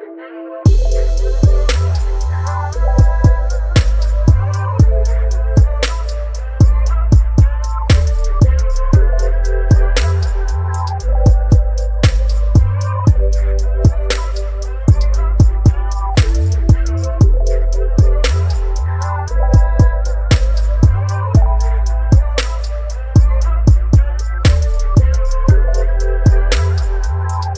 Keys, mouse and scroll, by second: 0.5 click, 1.6 click, 10.6 click, 14.5-21.4 shift+drag.